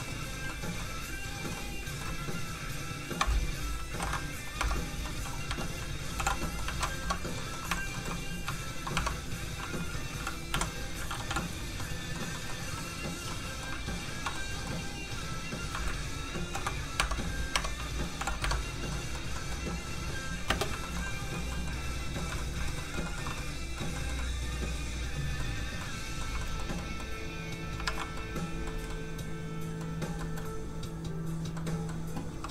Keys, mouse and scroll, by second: 1.3 click, 1.6 middle click, 2.4 shift+click, 2.9 shift+click, 3.3 ctrl+click, 3.9 ctrl+p, 4.6 Tab, 5.0 middle click, 5.5 Tab, 6.2 alt+h, 6.4 middle click, 6.7 alt+a, 7.2 scroll down 1, 7.4 middle click, 7.7 shift+middle click, 8.0 shift+middle click, 8.3 shift+click, 8.6 shift+click, 8.9 shift+Tab, 9.2-10.5 scroll up 1, 10.5 l, 11.3 h, 11.8 middle click, 13.1 click, 13.3 middle click, 14.1 shift+click, 14.3 middle click, 15.6 shift+click, 16.4 ctrl+shift+p, 16.7 click, 17.0 Tab, 18.2 alt+h, 18.4 Tab, 18.7 scroll down 1, 18.9 middle click, 19.8 scroll down 1, 20.5 space, 20.8 shift+middle click, 21.0 middle click, 21.1 middle click, 21.3 shift+middle click, 21.6 shift+middle click, 21.6 middle click, 22.4 shift+middle click, 22.5 middle click, 23.0 shift+middle click, 23.4 middle click, 23.5 middle click, 26.2-26.8 scroll up 2, 26.4 shift+middle click, 26.8 middle click, 27.8 alt+a, 28.3 middle click, 30.2 shift+middle click, 31.2 click, 31.6 middle click, 32.3 r.